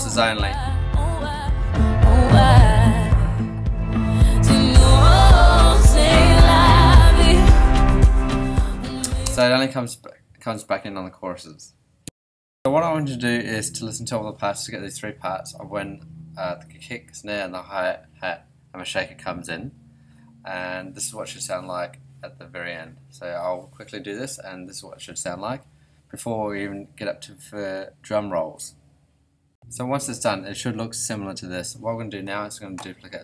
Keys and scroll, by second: 0.8 BackSpace, 9.2 space.